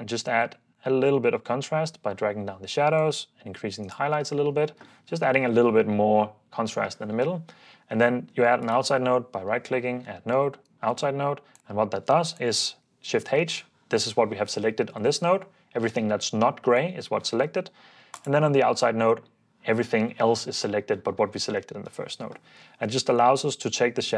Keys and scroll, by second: 4.2 super+d, 11.0 ↺, 13.2 h, 21.8 h.